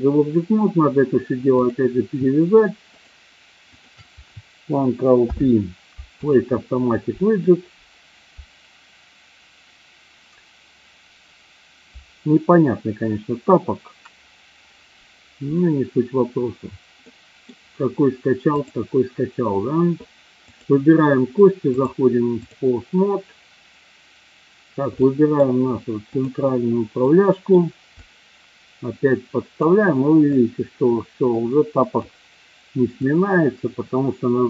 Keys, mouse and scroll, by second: 3.7 shift+click, 5.2 ctrl+p, 16.9 middle click, 18.6 click, 20.6 click, 21.8-22.4 drag, 25.0-25.3 middle drag, 26.1-26.4 drag, 27.1-27.4 middle drag, 28.0-29.6 drag, 30.3-32.0 drag, 33.1-34.4 drag.